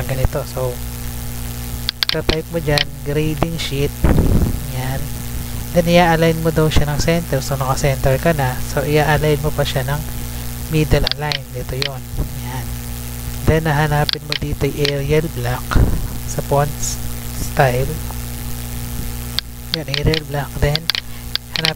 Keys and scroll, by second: 0.3 Tab, 3.2 ctrl+v, 4.1 Return, 4.7 Up.